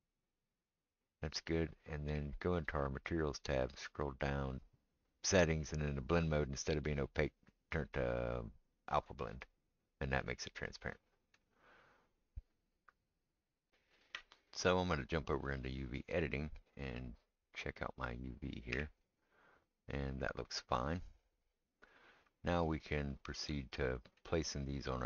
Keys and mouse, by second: 0.4-8.5 right drag, 6.6-10.6 drag, 6.6-8.5 middle drag, 12.7-16.3 drag, 12.7-15.0 middle drag, 12.7-25.0 right drag, 18.7 a, 23.3 click.